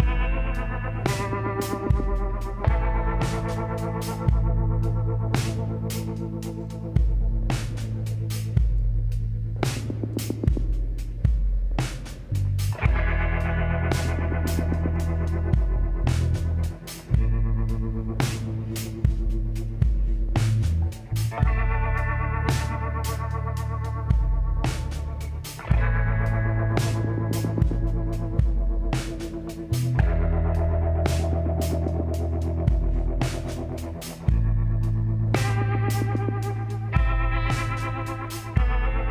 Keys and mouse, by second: 0.2-2.1 drag, 1.9 middle click, 2.3-7.0 drag, 7.6-12.8 drag, 13.8-16.7 drag, 17.3-19.3 middle drag, 21.1-23.0 middle drag, 23.0-26.5 drag, 26.5-29.8 drag, 29.8-31.6 middle drag, 32.1-34.4 drag, 33.5 shift+s, 36.3 shift+a.